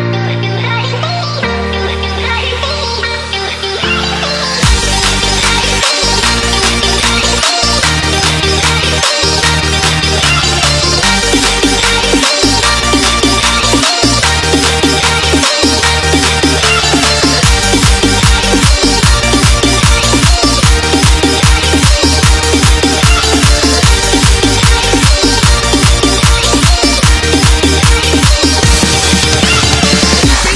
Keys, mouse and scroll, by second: 2.2 scroll down 1, 3.1 scroll up 1, 3.8 scroll down 1, 5.0 click, 8.9 ctrl+c, 9.2 alt+Tab, 10.3 v, 11.3 click, 17.0 click, 19.0 Delete, 20.1 click, 20.6 click, 21.6 alt+scroll down 1, 22.1 click, 24.1 Return, 24.6 click, 25.0 scroll down 1, 25.8 click.